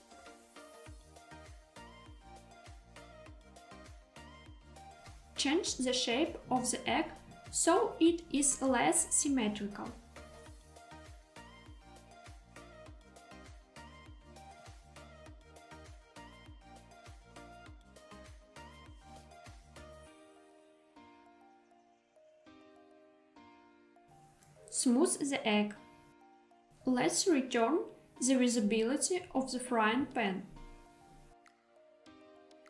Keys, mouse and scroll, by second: 3.5 click, 5.0 2, 5.6 click, 8.2 g, 8.6 y, 11.2 click, 11.8 click, 12.1 shift+middle click, 12.3 g, 12.5 y, 14.7 click, 14.9 shift+middle click, 14.9 click, 15.9 g, 16.0 y, 19.0 click, 19.9 middle click, 21.0-22.0 scroll down 3, 21.6 middle click, 23.1 Tab, 24.0 middle click, 24.4-26.7 right drag, 29.4 click, 30.9 click.